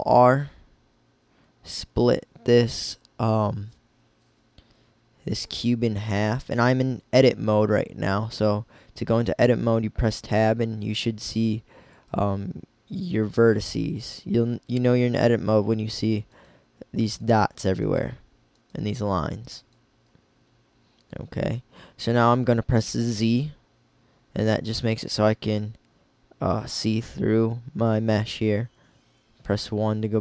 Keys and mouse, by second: 7.1-13.7 drag, 16.3-21.1 right drag, 22.9-24.4 drag, 22.9 z, 29.0 KP_1.